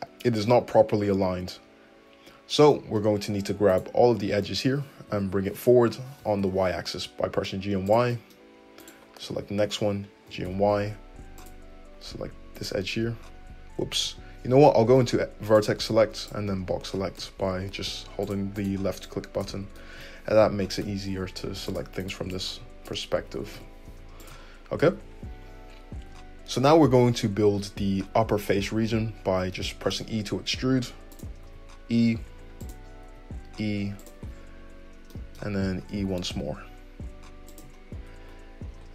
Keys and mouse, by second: 3.7 right click, 3.7 middle click, 4.0 `, 4.1-8.9 drag, 5.0 h, 5.8 ctrl+z, 6.2 g, 9.2 `, 10.2 g, 12.5 click, 13.9 1, 15.4 click, 15.8-18.3 drag, 16.9 g, 18.3 middle click, 18.5 click, 18.6 middle click, 19.1-21.7 drag, 20.6 g, 21.7 middle click, 22.0 click, 22.1 middle click, 22.3-24.2 drag, 23.3 g, 24.2 middle click, 24.5-37.6 drag, 24.9 `, 26.1 `, 30.0 e, 31.4 e, 33.0 e, 35.8 e.